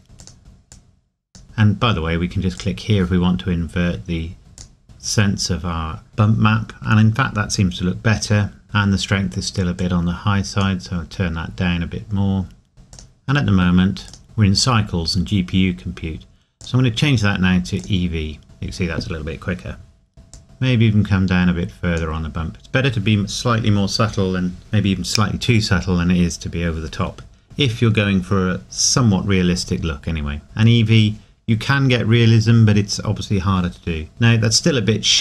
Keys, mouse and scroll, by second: 0.2 click, 1.4 scroll down 1, 2.6 click, 4.6 click, 8.1 scroll up 1, 9.8 click, 12.9 click, 16.6 click, 20.3 click, 27.1 scroll down 1, 29.8 scroll down 1, 33.7 scroll up 1.